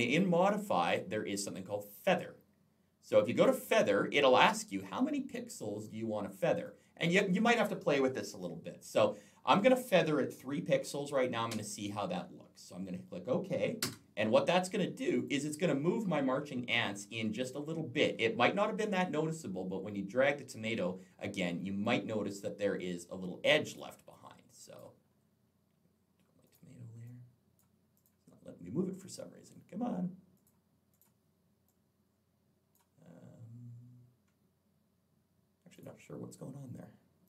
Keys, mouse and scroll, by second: 3.2 click, 4.4 click, 6.5 click, 11.3 3, 13.7 Return, 15.0 click, 16.2-17.1 alt+scroll up 1, 18.6-18.9 alt+scroll down 1, 21.7 click, 23.9 click, 25.1 scroll up 1, 25.3-26.1 scroll down 2, 26.3 click, 26.9 click, 27.8 click, 30.2 click, 30.8 click, 35.5 click, 37.1 click.